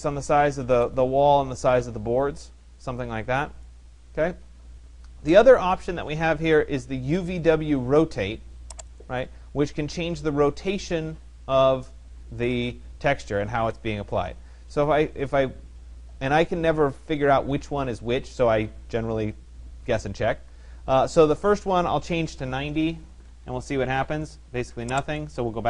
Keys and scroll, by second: 21.7 0, 23.1 Tab, 25.5 0.